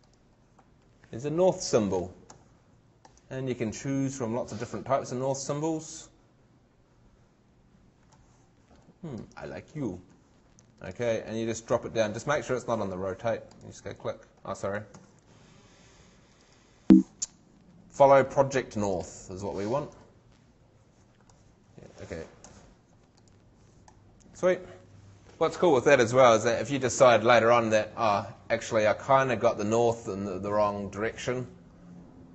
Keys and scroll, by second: 14.9 shift+super+z.